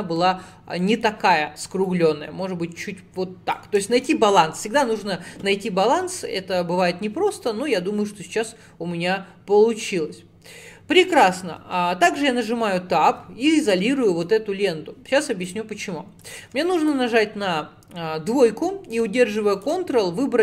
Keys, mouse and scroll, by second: 0.0 middle click, 0.5-0.8 scroll up 2, 0.8-1.9 middle drag, 1.9-3.9 drag, 3.9-6.9 shift+middle drag, 11.6 Tab, 13.6 /, 14.1 middle click, 14.7-15.5 scroll up 1, 15.5 click, 16.6 2, 16.8 click, 19.6 ctrl+click.